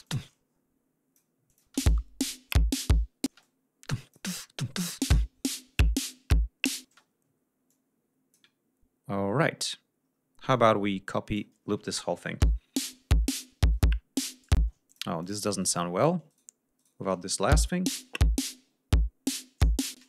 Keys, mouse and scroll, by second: 0.0-1.3 ctrl+drag, 1.4 click, 1.6 space, 3.2 space, 3.3-4.2 drag, 4.7 click, 4.9 space, 6.8 space, 7.6 click, 9.5 scroll up 2, 9.9 scroll down 2, 10.4 click, 12.3 l, 14.5 space, 14.8 click, 15.1 click, 15.5 shift+right click, 16.2 shift+right click, 16.7 shift+right click, 17.4 shift+l, 19.9 space.